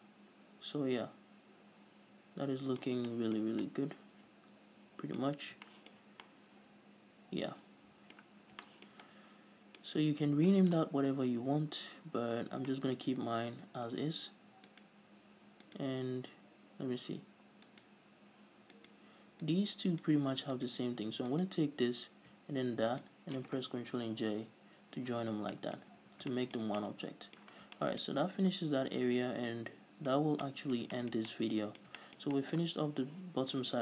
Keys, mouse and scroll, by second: 5.7-6.1 scroll up 2, 8.8 scroll down 2, 10.3-10.9 scroll up 2, 11.7-12.5 scroll up 2, 12.5 scroll up 1, 12.8-13.1 scroll down 2, 13.5-14.7 scroll up 2, 14.7-15.2 scroll up 1, 15.2 right click, 16.1 right click, 18.1 right click, 19.3 right click, 20.4 right click, 21.1-22.6 right drag, 23.4 shift+right click, 24.7 ctrl+j, 25.6 scroll down 2, 26.0-33.8 middle drag, 26.3 a, 26.6 scroll down 1, 28.0 scroll down 1, 30.6-30.9 scroll up 2.